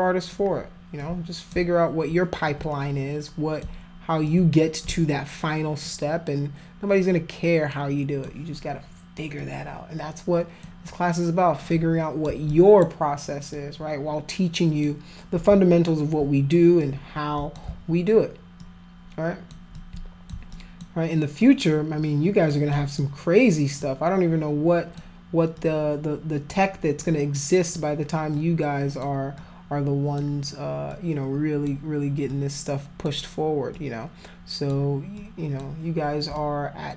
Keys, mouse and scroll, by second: 1.0 alt+click, 2.5-3.6 alt+drag, 4.3 alt+click, 5.9-8.2 alt+drag, 9.4-10.6 alt+drag, 11.7 click, 12.5 alt+click, 13.5-14.8 alt+drag, 16.8 click, 18.6 alt+click, 19.7 alt+click, 20.5 alt+click, 21.4-22.5 alt+drag, 22.7 alt+click, 23.8-25.0 alt+drag, 25.5 alt+click, 27.0 alt+click, 28.4 alt+click, 29.4 alt+click, 30.9 alt+click, 32.3 alt+click, 33.7 alt+click, 35.1 alt+click, 36.4 click.